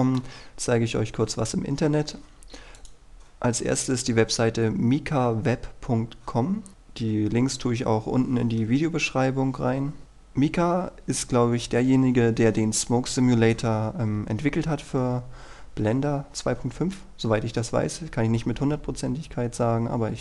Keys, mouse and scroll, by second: 2.9-4.0 drag.